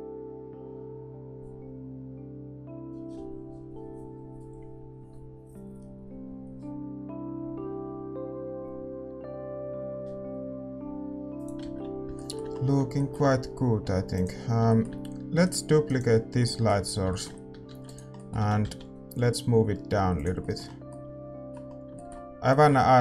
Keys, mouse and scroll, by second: 11.4-16.3 drag, 12.1-16.9 middle drag, 12.1 shift+z, 15.4-16.9 right drag, 17.6 shift+d, 20.3 g, 20.8-23.0 middle drag.